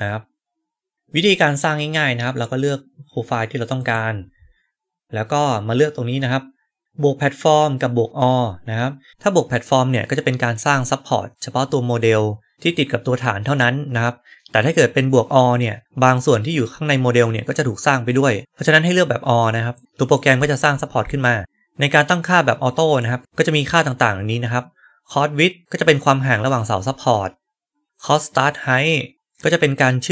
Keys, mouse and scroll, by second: 1.8-2.3 right drag, 3.7 right click, 3.7 click, 19.6 right click, 19.8 right drag, 20.3 scroll down 1, 20.6 scroll up 1, 21.0-22.9 right drag.